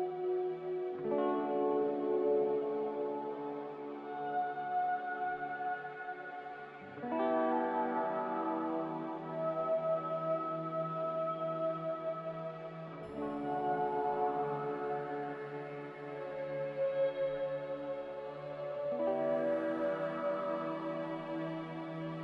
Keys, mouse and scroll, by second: 7.8 q, 9.8 q, 11.0 c.